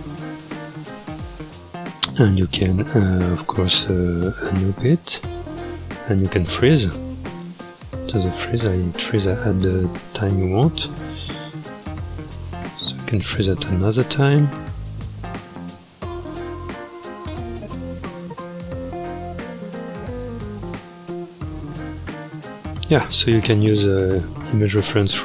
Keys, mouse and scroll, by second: 0.4 space, 4.5-8.6 drag, 8.6 space, 9.4-12.8 drag, 12.8-13.8 scroll down 1, 15.0-18.0 drag, 18.0 space, 20.7 space, 21.7 click, 22.4 scroll, 22.9 shift+middle click, 23.6-24.0 scroll.